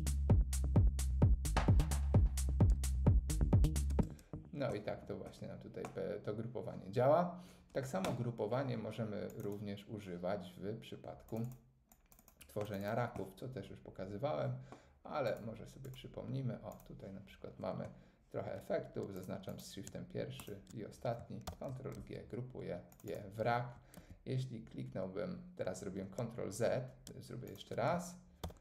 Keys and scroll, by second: 3.9 space, 21.5 super+g, 24.0 super+z, 28.4 super+g.